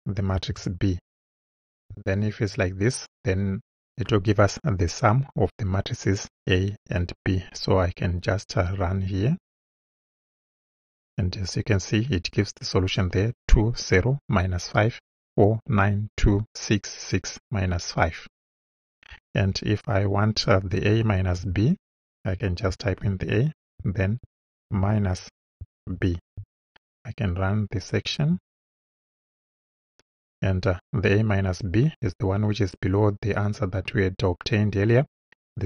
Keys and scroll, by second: 0.4 shift+b, 21.4 Return, 23.1 shift+a, 24.7-26.4 typing.